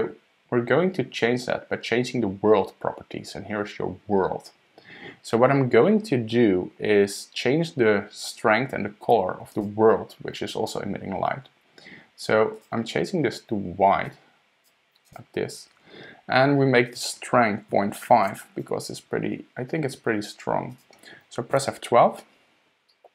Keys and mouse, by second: 9.5 click, 12.5 click, 16.9-19.1 drag, 20.7 click, 21.5 F12.